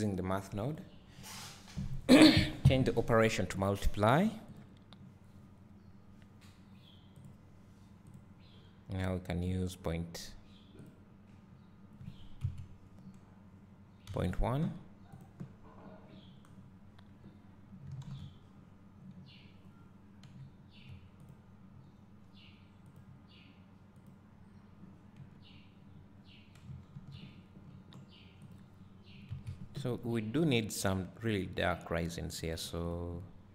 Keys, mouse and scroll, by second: 5.7-10.5 drag, 12.2-15.4 drag, 16.6 scroll down 1, 19.8 scroll up 1, 21.9 click, 24.4-28.6 drag, 25.6-27.2 scroll down 2, 27.2-28.5 scroll down 1, 32.6 click.